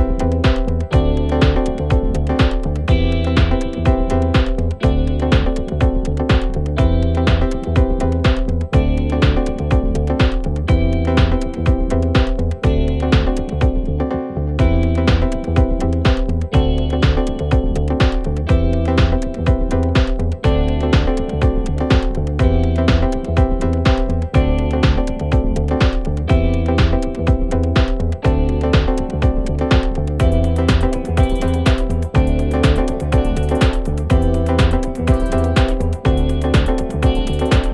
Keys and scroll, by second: 1.6 ctrl+z, 5.4 ctrl+z, 21.3 ctrl+z, 35.5 4, 36.4 4.